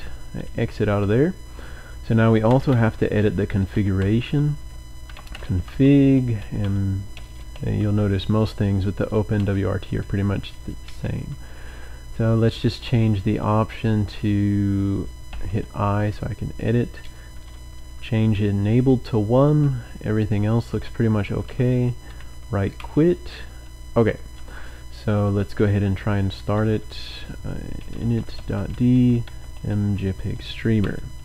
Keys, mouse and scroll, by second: 1.5-7.9 typing, 9.1 typing, 10.8 Down, 10.9-12.5 typing, 15.3 typing, 16.9 typing, 17.9 typing, 20.1-22.8 typing, 25.2-30.8 typing.